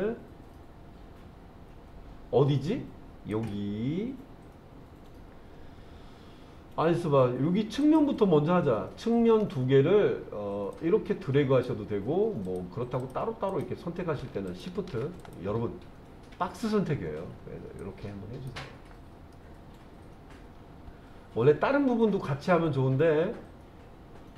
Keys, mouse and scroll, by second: 0.0 click, 3.3 click, 7.8 click, 10.7 click, 12.4 click, 13.0 click, 13.5 click, 14.5 shift+click, 15.2 click, 17.8-18.5 drag, 19.3-24.3 middle drag.